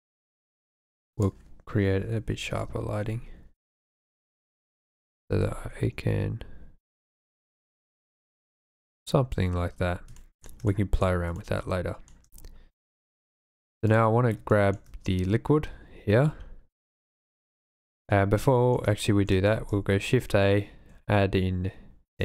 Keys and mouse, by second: 1.2-2.6 drag, 4.1 r, 4.3 z, 5.1 y, 5.4 x, 9.0 click, 10.3 shift+drag, 10.7-11.2 middle drag, 11.4-12.1 shift+middle drag, 13.0 shift+middle click, 13.7 middle click, 14.4-14.8 shift+middle drag, 16.9 shift+click, 17.9 shift+middle click, 18.4-18.9 drag, 19.1 shift+click, 19.5 shift+a.